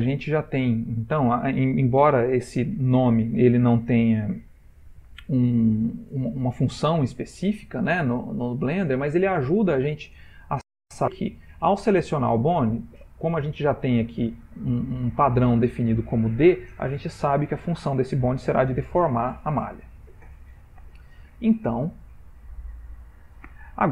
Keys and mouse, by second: 11.7 click, 21.7 ctrl+middle click.